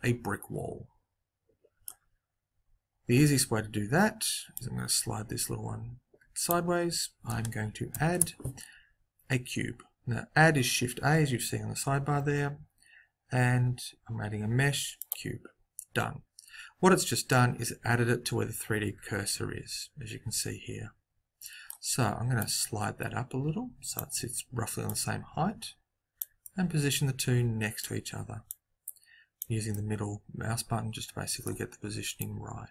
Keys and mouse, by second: 0.0 middle click, 4.5 click, 7.9 shift+a, 17.2-18.5 middle drag, 22.3 click, 24.8-26.3 drag, 26.3 middle click, 28.4 click, 29.6 middle click, 29.9 click, 30.0 middle click, 32.1 click.